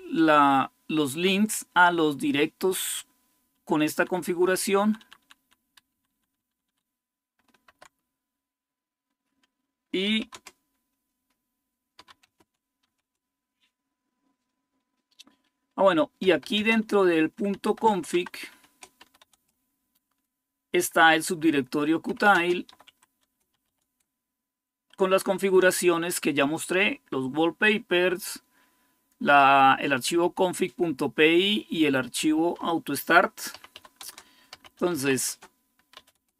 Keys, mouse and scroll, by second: 3.7 Page_Down, 4.2 Page_Down, 4.6 Page_Down, 4.8 Page_Down, 5.0 Page_Down, 5.7 Page_Up, 5.9 Page_Up, 6.1-7.5 Page_Up, 9.8 c, 12.0 ctrl+x, 12.4-13.1 typing, 13.4 Return, 16.0 Return, 16.3-19.6 typing, 21.6-24.1 typing, 27.0-27.7 typing, 33.2-36.3 typing.